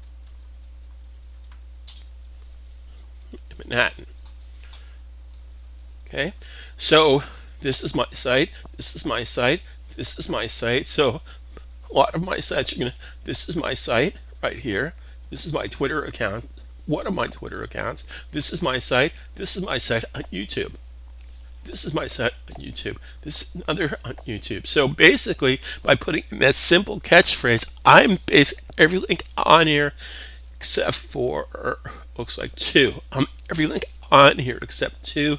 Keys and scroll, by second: 0.0-1.5 typing.